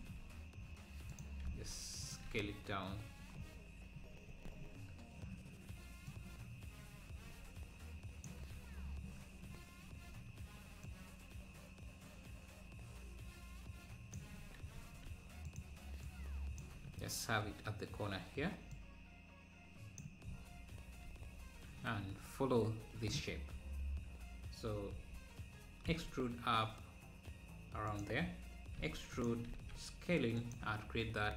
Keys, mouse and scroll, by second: 1.5 s, 2.8-3.6 scroll down 10, 4.4 z, 6.1 Left, 8.4 KP_Decimal, 8.8-9.4 scroll down 4, 10.9 Left, 14.8 s, 16.1 click, 16.8 `, 18.8 click, 20.2 scroll down 1, 21.0 Tab, 21.3 Tab, 23.2 scroll up 2, 23.8 Tab, 25.0 Tab, 25.9 e, 28.8 e, 29.5 s.